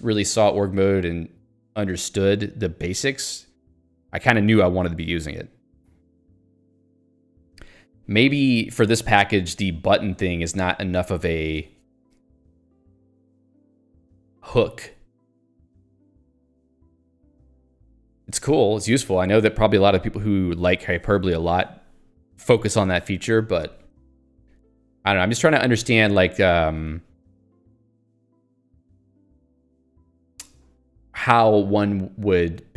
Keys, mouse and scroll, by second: 7.7 click, 8.7 click, 9.0 Escape, 26.0 click, 26.8 Escape.